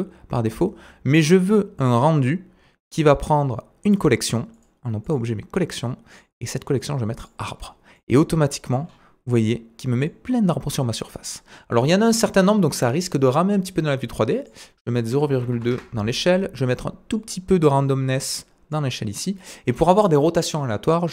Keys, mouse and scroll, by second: 1.8 click, 2.8 click, 4.5 click, 6.1 click, 8.0-10.4 middle drag, 8.9-9.3 scroll up 1, 10.4 scroll down 1, 12.7 click, 14.5 click, 17.1 click, 19.7-20.3 drag.